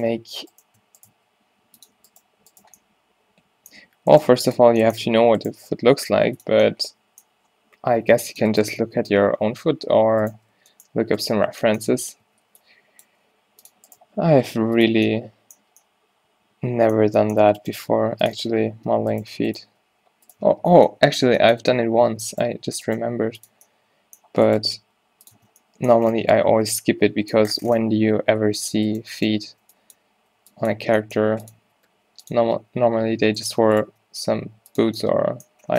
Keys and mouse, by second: 0.3 g, 1.2 g, 2.3 g, 4.0 middle click, 6.0 g, 6.2 click, 8.3 ctrl+r, 11.1-12.2 drag, 11.1 g, 12.2-15.0 typing, 19.8 Tab, 19.8 g, 20.5 Tab, 21.7 Tab, 24.8 g, 25.4 Tab, 27.8 Tab, 28.1 z, 31.4 right click, 31.6 b, 31.6 g, 31.7 z, 32.1 g, 32.6 Tab, 33.1 Tab, 34.3 g.